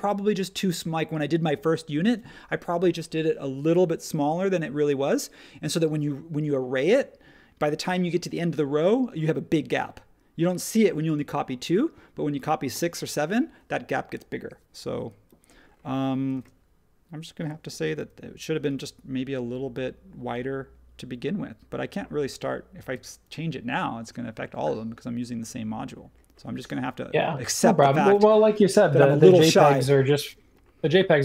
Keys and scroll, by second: 16.3 space.